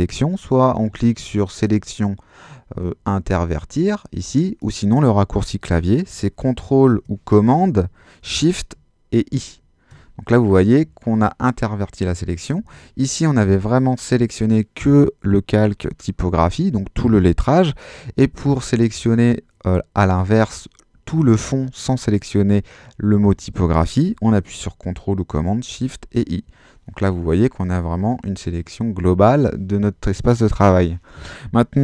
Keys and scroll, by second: 9.3 shift+super+i, 12.6 super+z, 25.8 shift+super+i.